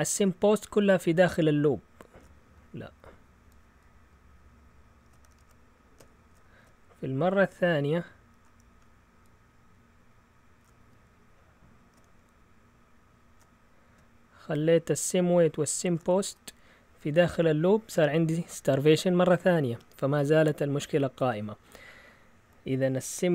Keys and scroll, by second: 5.4 shift+super+x, 5.9 shift+super+x.